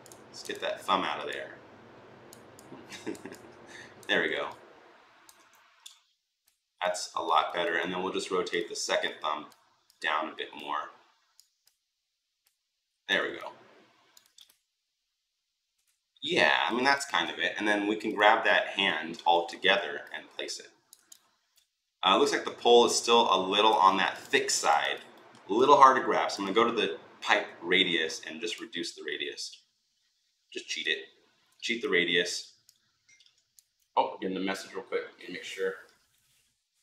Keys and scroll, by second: 18.9 Delete.